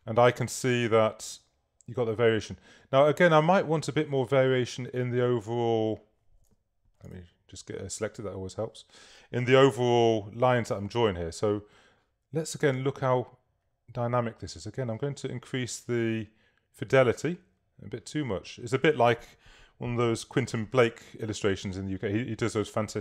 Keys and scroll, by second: 7.3 super+a, 9.6 v.